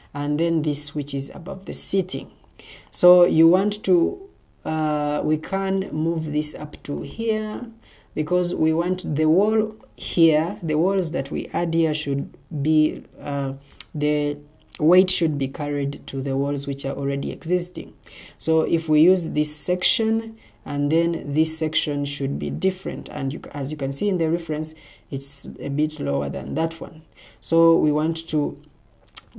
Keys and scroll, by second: 7.8 Escape.